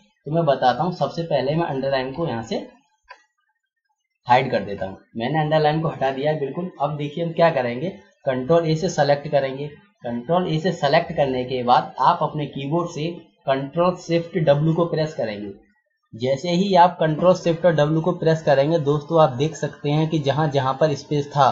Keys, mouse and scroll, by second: 2.1 ctrl+a, 4.0 click, 8.8 ctrl+a, 14.4 ctrl+shift+w, 17.9 click.